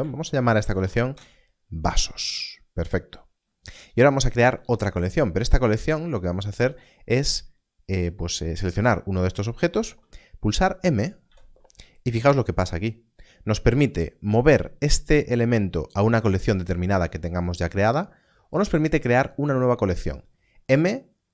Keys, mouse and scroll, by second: 0.3 shift+v, 0.7 s, 1.1 Return, 6.6 Return, 11.2 m.